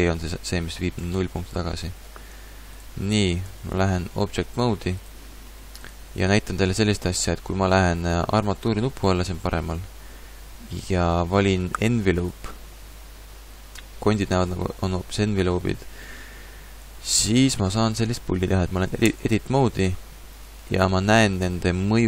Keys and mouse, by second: 0.0 alt+g, 1.0 a, 3.8 ctrl+Tab, 8.5-10.4 drag, 12.2-14.1 drag, 14.6-17.0 middle drag, 19.1 Tab.